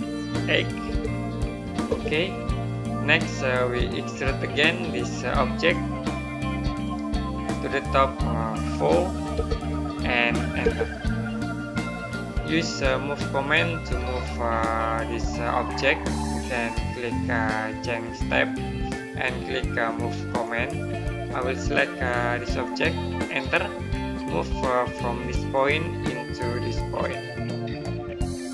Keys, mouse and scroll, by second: 0.7 KP_8, 1.7 space, 4.3 click, 6.7 right click, 7.2 click, 9.2 KP_4, 17.9 click, 23.1 right click, 25.3 click, 28.1 click.